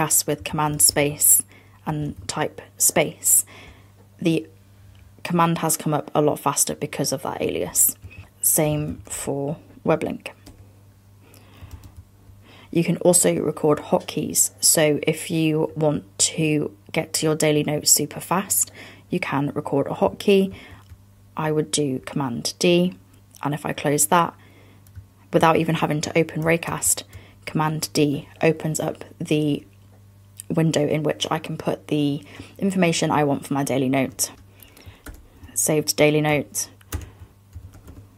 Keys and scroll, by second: 2.0 BackSpace, 8.2 super+a, 8.3 BackSpace, 11.8 super+,, 20.6 super+d, 26.7 super+d, 34.4 BackSpace, 35.1 super+Return, 37.0 super+space.